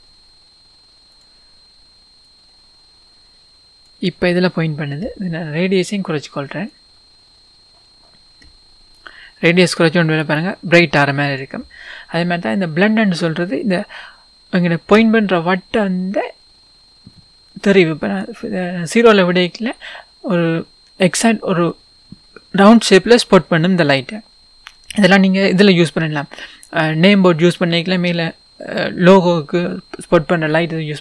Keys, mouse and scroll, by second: 1.2 click, 2.4 click, 6.9-21.8 drag, 21.8-31.0 middle drag.